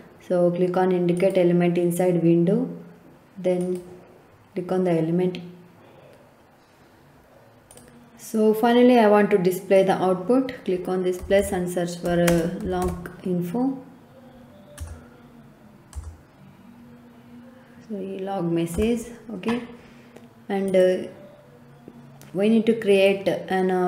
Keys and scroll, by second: 10.9-13.3 typing, 14.7 BackSpace, 15.9 BackSpace, 18.7 Return.